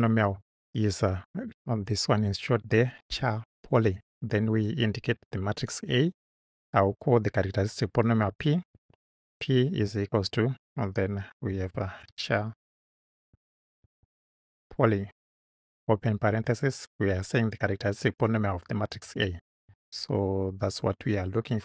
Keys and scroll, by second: 8.7 shift+p, 9.8 =, 11.0-15.0 typing, 16.3 shift+9, 18.9 shift+a, 20.5 Right.